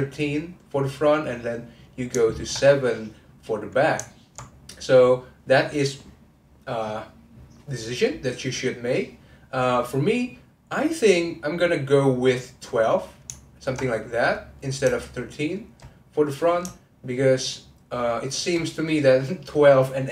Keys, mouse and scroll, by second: 1.2 click, 1.4 middle click, 2.4 ctrl+click, 3.2-8.1 middle drag, 11.1-12.3 middle drag, 12.3 click, 12.7 middle click, 13.5 ctrl+click, 14.6 middle click, 15.2 shift+click, 18.0 shift+click.